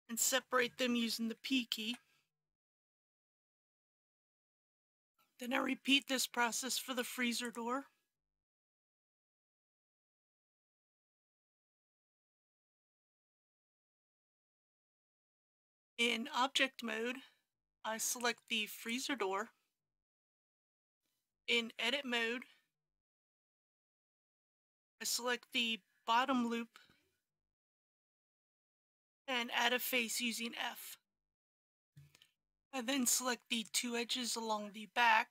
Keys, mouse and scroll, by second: 0.3-1.8 scroll up 1, 1.8 p, 2.7 click, 4.3 Return, 5.6 middle click, 7.4-8.5 drag, 8.7 shift+click, 9.2 shift+click, 9.7 middle click, 10.2 scroll down 1, 10.7 shift+scroll up 1, 11.0 shift+click, 12.7 p, 14.0 click, 15.0 Tab, 17.7 click, 21.0 middle click, 21.9 scroll up 1, 23.0 shift+middle click, 23.8-25.3 middle drag, 27.3 alt+click, 28.0 alt+click, 30.7 f, 31.9 click.